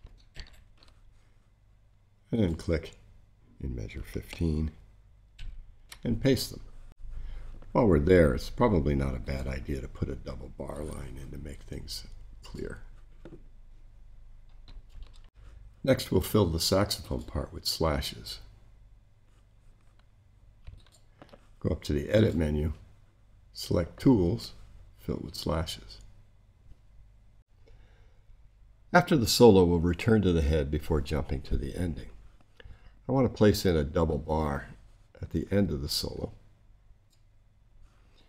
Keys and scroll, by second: 0.3 shift+super+c, 5.3 shift+super+v.